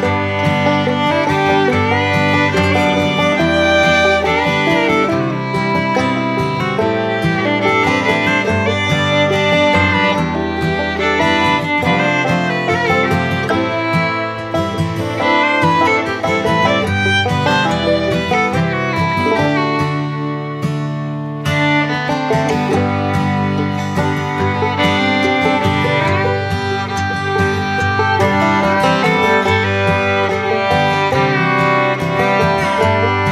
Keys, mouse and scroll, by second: 2.5-11.7 alt+drag, 13.4-17.3 alt+shift+drag, 19.5 right click, 20.2 click, 21.8 click, 26.4-28.6 drag, 30.7 ctrl+z, 32.4 click.